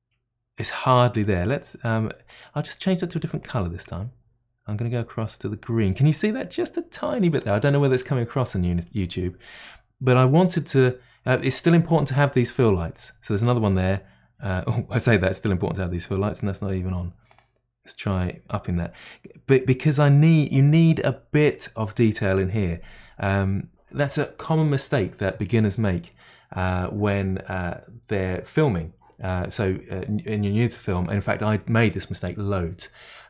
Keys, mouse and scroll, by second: 2.3 click, 3.4 click, 12.1-13.3 middle drag, 13.3 click, 17.3-18.5 drag.